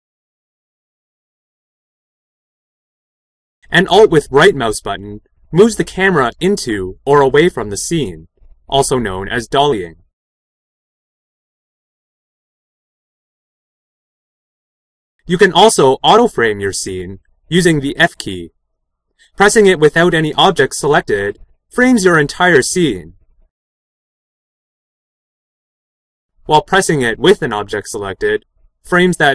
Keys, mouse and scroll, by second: 3.4-10.0 right drag, 10.0 middle click, 10.0 scroll down 2, 10.2 right click, 15.2 f.